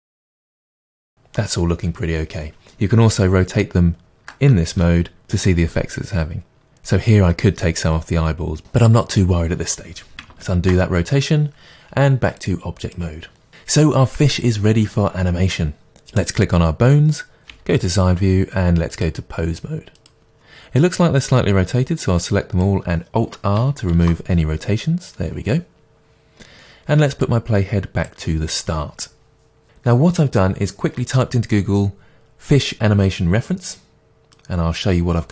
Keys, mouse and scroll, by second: 3.2 r, 4.2 ctrl+click, 4.7 r, 6.6 click, 10.4 ctrl+z, 12.4-16.3 drag, 17.4-18.5 middle drag, 17.5 KP_3, 18.9-21.8 drag, 24.0 alt+r, 27.3-34.6 drag, 35.0 click.